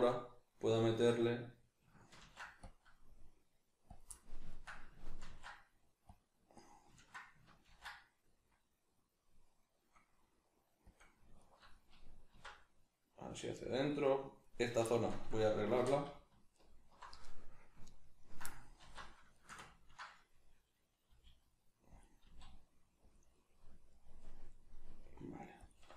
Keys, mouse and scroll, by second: 2.2 ctrl+r, 4.0 click, 4.1-5.3 middle drag, 5.3 ctrl+r, 6.7 right click, 7.0 ctrl+middle click, 7.7 ctrl+b, 11.0 click, 11.4 alt+right click, 11.8 middle click, 12.3 alt+s, 13.7 click, 14.0 middle click, 14.9 shift+middle click, 15.8 3, 16.6 alt+right click, 18.8 alt+q, 19.3-21.1 ctrl+shift+middle drag, 21.1 g, 22.0 click, 22.2 s, 23.1 click, 23.3-25.0 middle drag, 25.0 g, 25.7 click.